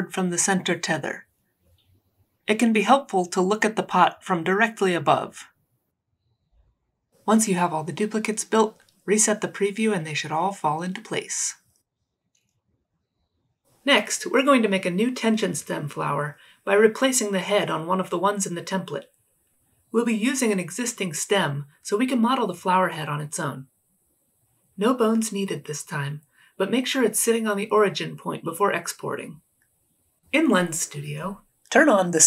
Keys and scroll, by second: 0.0 e, 1.4 ctrl+d, 1.7 w, 2.3 e, 3.1 w, 3.8 ctrl+d, 4.6 e, 5.4 ctrl+z.